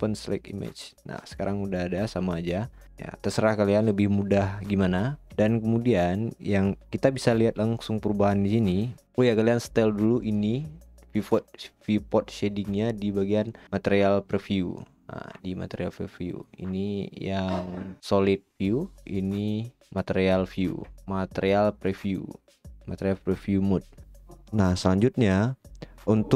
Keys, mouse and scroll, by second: 1.3-16.4 drag, 19.4 click.